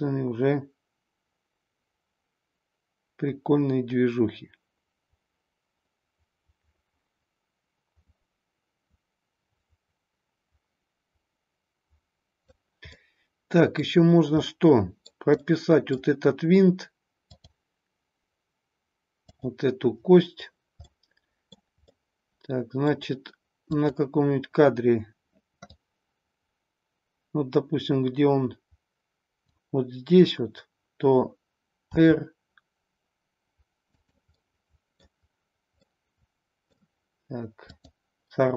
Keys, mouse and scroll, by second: 12.9-13.9 middle drag, 14.5 middle click, 15.5-16.0 middle drag, 17.3-20.1 drag, 21.4 middle drag, 21.9-23.0 middle drag, 23.6 click, 25.6-29.6 drag, 31.9 r, 33.8-35.1 drag, 35.8-36.8 middle drag, 37.6-38.5 drag.